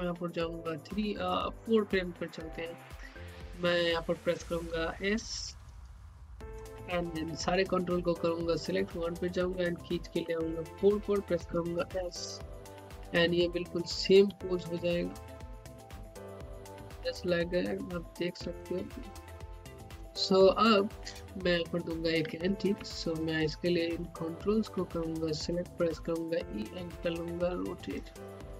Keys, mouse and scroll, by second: 5.3-5.7 typing, 7.4 click, 9.2-11.3 middle drag, 11.3-14.3 typing, 15.4-19.3 typing, 21.9 scroll down 1, 22.3 alt+middle click, 22.6 scroll up 1, 22.9 alt+middle click, 23.1 alt+middle click, 23.3-25.9 drag, 25.9 e, 26.6-28.1 drag, 28.2 click.